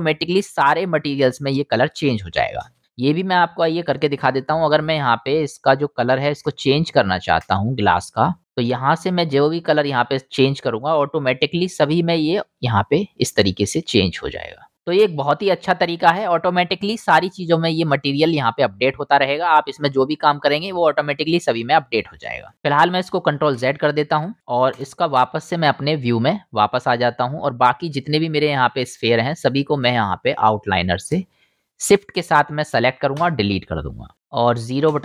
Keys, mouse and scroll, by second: 2.6 ctrl+space, 3.5-4.7 right drag, 5.1 right drag, 5.3 right drag, 5.5-7.3 drag, 7.7-9.8 right drag, 11.6-12.1 drag, 12.3-12.6 drag, 13.4 drag, 14.7 click, 15.4-16.1 drag, 16.7-18.1 drag, 18.5-19.6 drag, 21.7-22.3 middle drag, 23.6 ctrl+z, 24.7 KP_0, 28.0-30.6 drag, 30.6 shift+middle click, 30.7-35.0 shift+drag, 33.2 Delete, 34.9 KP_0.